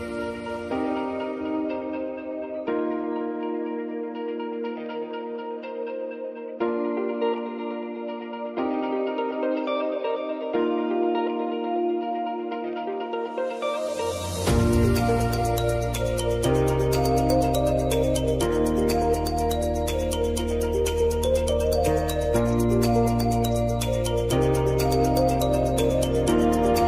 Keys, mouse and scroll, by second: 6.6 click, 7.1 ctrl+c, 7.8 click, 8.5 ctrl+v, 9.3 space, 12.1-13.6 drag, 14.8 ctrl+v, 15.6 space, 17.4 click, 17.7 space, 19.5 shift+click, 20.0 ctrl+v, 21.0 click, 21.3 space.